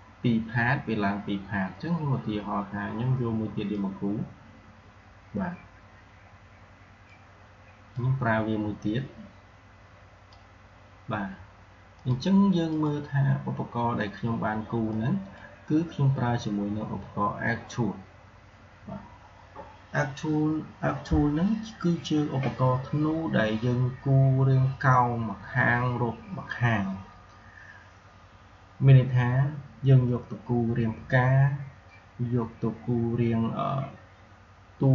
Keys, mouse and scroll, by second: 3.6-17.7 drag.